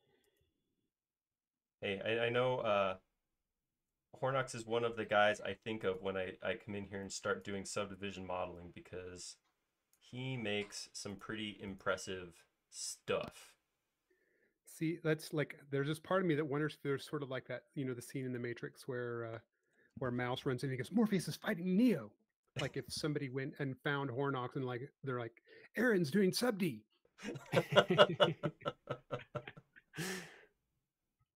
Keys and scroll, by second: 6.8 shift+e, 10.9 space, 17.9 m, 22.6 q, 24.1 Left.